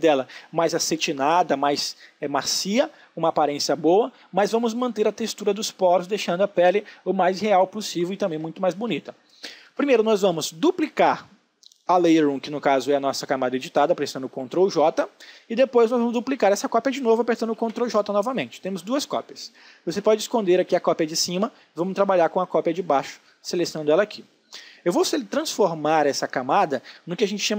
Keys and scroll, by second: 13.8 ctrl+j.